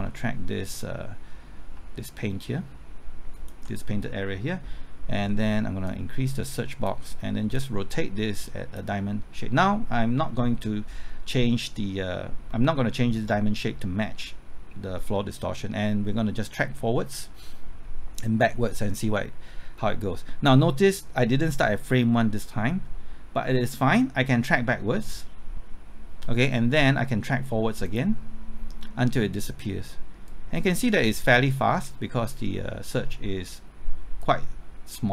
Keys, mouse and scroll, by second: 1.7 typing, 3.3 ctrl+click, 5.8-35.1 drag.